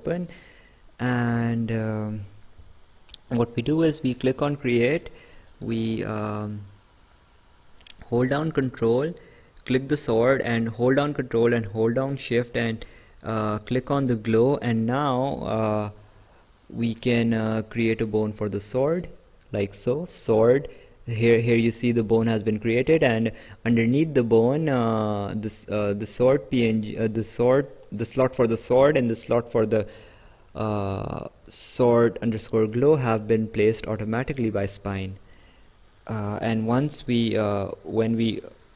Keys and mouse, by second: 3.8 click, 9.7 ctrl+click, 13.7 ctrl+shift+click, 16.8 click, 25.1 click, 34.3 right click, 35.9 click, 38.2 Escape.